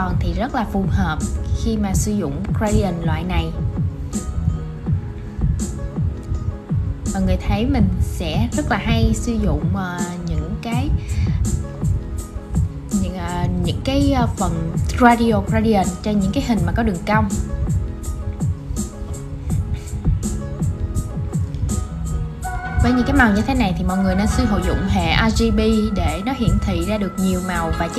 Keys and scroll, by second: 22.4 super+c, 23.2 shift+super+v, 25.3 super+x.